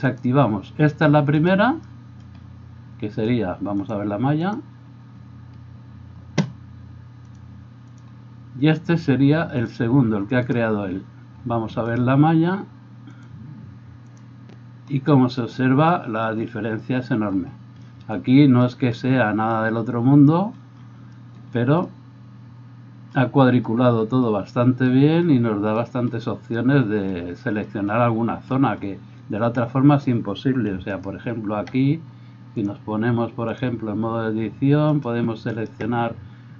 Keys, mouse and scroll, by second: 0.1 click, 0.3-1.4 middle drag, 1.4 right click, 1.5-3.9 middle drag, 3.9-9.7 drag, 9.7-10.4 middle drag, 10.4 click, 10.5-13.1 middle drag, 13.1-36.5 drag, 31.1 alt+middle click, 31.1 alt+right click.